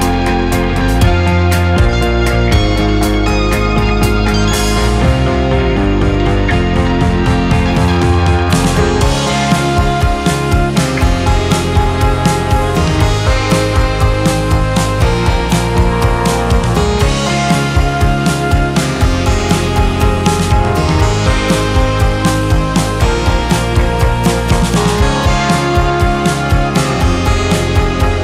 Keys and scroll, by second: 3.1 space, 7.0 space, 8.7 space, 11.3 space, 11.7 2, 15.3 Delete, 15.8 space, 22.9 space.